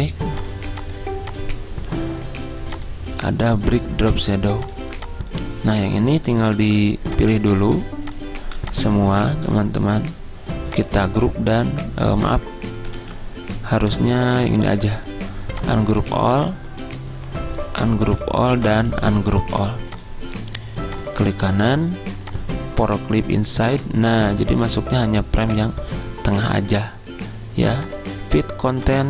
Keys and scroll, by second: 6.5 ctrl+z, 13.1 ctrl+z.